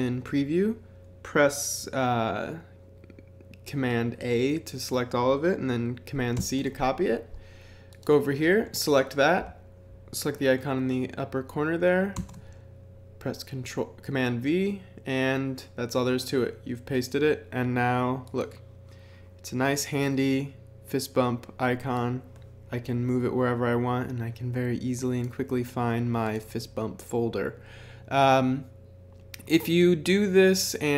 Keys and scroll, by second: 6.4 super+c, 12.1 super+v.